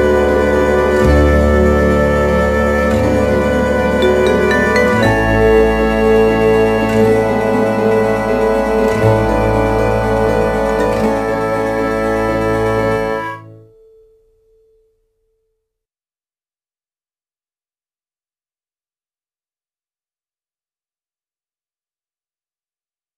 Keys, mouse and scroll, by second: 14.8 click.